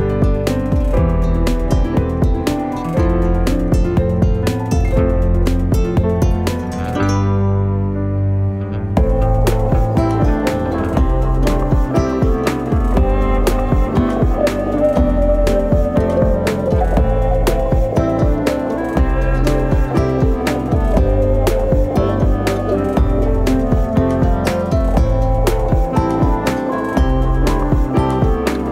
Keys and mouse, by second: 0.3 Tab, 0.7 s, 2.2 middle click, 2.6 Tab, 3.1 right click, 4.6 shift+right click, 6.3 middle click, 7.3 ctrl+b, 11.4 Tab, 11.7 middle click, 12.2 w, 13.6 z, 15.4 shift+middle drag, 16.3 middle drag, 17.0 z, 18.0 g, 19.0 r, 19.9 r, 20.9 r, 21.6 middle click, 21.8 z, 22.8 middle click, 24.1 middle click, 27.0 right click.